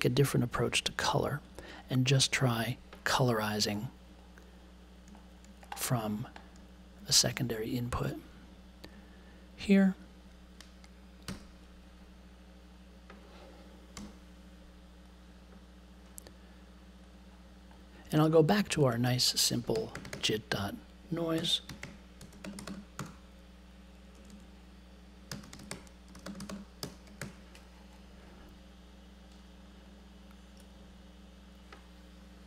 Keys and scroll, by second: 11.2 BackSpace, 11.3 2, 13.9 BackSpace, 19.4-27.3 typing.